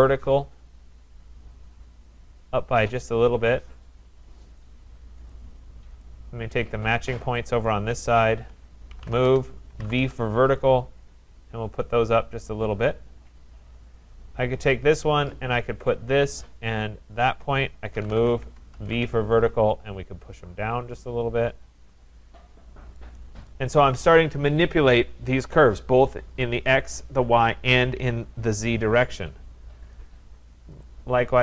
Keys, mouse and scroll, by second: 0.0-0.4 typing, 1.4 click, 4.1 click, 5.3 click, 6.0 click, 7.4 click, 8.2 shift+click, 8.9-10.1 typing, 11.1 click, 12.6 click, 13.0-13.7 typing, 14.0 click, 15.9 click, 17.7-19.6 typing, 20.2 click, 21.8 click, 23.5 right click, 30.1 click, 30.8 click.